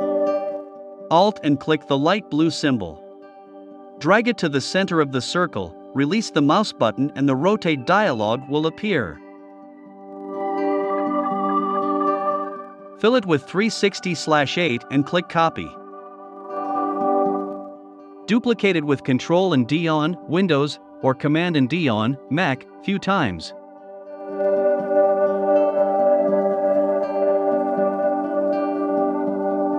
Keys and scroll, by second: 10.6-12.7 typing, 17.0 super+d, 24.6 super+c, 25.0 super+f, 25.6 shift+Up.